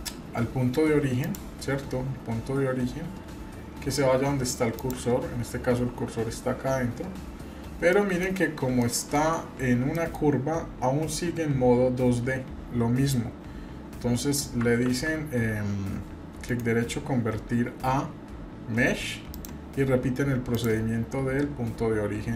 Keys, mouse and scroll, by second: 1.2-4.9 drag, 7.9-8.2 middle drag, 8.4-8.7 scroll up 2, 8.8-9.2 shift+middle drag, 9.5-9.8 scroll up 2, 9.9 shift+middle click, 11.1-12.3 scroll up 4, 14.8 ctrl+z, 16.6-19.4 right drag, 20.5-22.3 drag.